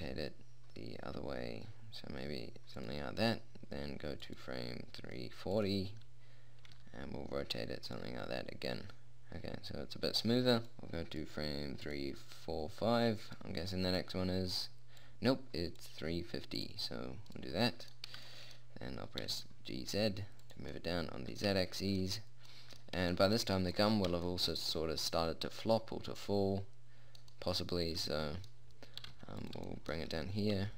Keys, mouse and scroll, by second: 4.6-7.6 drag, 7.0 r, 9.1 click, 10.8-12.4 middle drag, 13.7 middle click, 15.4 middle click, 17.7-19.4 middle drag, 19.6 g, 25.9 middle click, 29.4 g, 30.5 r.